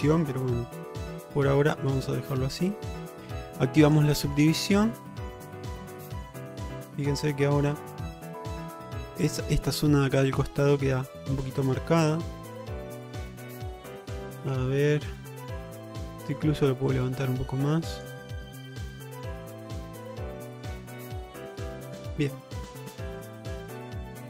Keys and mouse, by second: 0.7 g, 1.9 click, 2.8 click, 4.6 middle click, 5.9 middle click, 6.2 Tab, 7.0 middle drag, 7.3-9.6 middle drag, 11.4-12.4 middle drag, 13.7 click, 14.6 Tab, 16.0 click, 17.0-18.1 drag, 18.5 middle click, 19.6 middle click, 20.4 click, 21.0 click, 22.1 shift+middle click, 22.6 middle click, 23.0-24.1 middle drag.